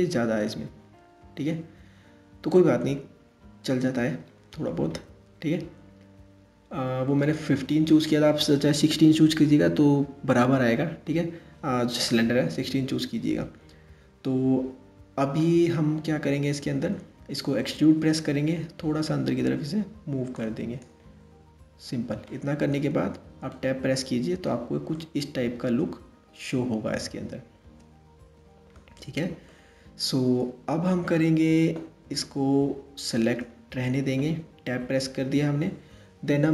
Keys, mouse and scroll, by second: 5.8-6.6 scroll up 1, 6.6-8.0 scroll down 1, 17.6 e, 21.9 middle click, 22.5 Tab, 23.1-27.6 middle drag, 28.5-29.1 scroll down 2, 29.1-30.9 middle drag, 30.9 scroll down 2, 31.8-34.4 middle drag, 34.4 Tab, 34.9 Tab.